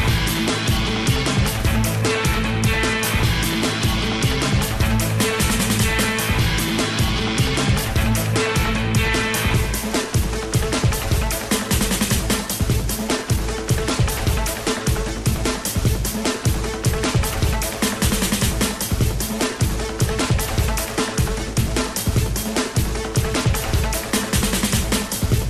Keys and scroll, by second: 16.5 i.